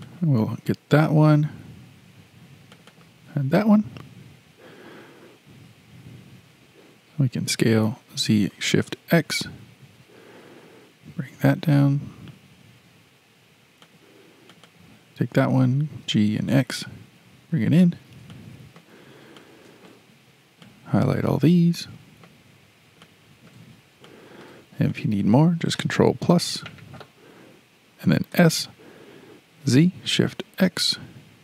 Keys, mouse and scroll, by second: 0.1 click, 2.7 shift+click, 2.9 shift+click, 7.5 s, 14.5 click, 14.7 click, 15.9 g, 18.3-18.9 shift+middle drag, 18.9 scroll down 7, 19.4-20.6 shift+middle drag, 20.6 click, 22.7 scroll up 4, 23.0-24.6 shift+middle drag, 24.6-24.9 scroll up 3, 24.9-26.2 shift+middle drag, 26.2 ctrl+KP_Add, 28.3 s.